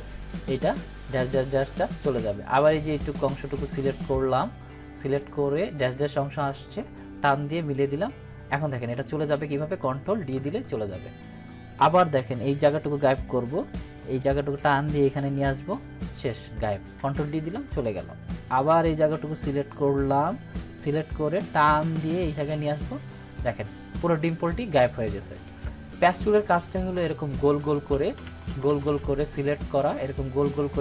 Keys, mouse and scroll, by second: 2.6-5.4 drag, 10.3 ctrl+d, 11.9-14.1 drag, 17.5 ctrl+d, 18.4-21.2 drag, 25.4 ctrl+d, 27.9 ctrl+z, 30.1-30.8 drag.